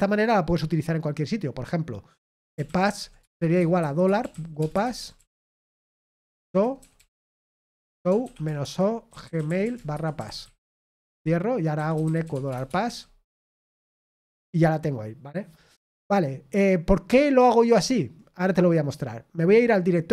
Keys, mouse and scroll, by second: 3.1-4.7 typing, 8.9-14.5 typing.